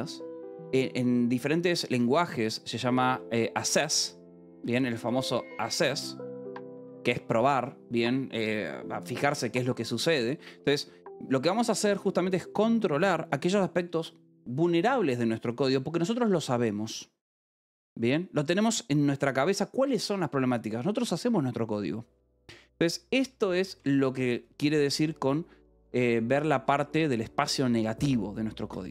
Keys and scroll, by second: 1.8 k, 3.0-7.1 typing, 11.3 j, 12.4 shift+v, 12.9 Escape, 24.2 shift+v, 24.8 Escape.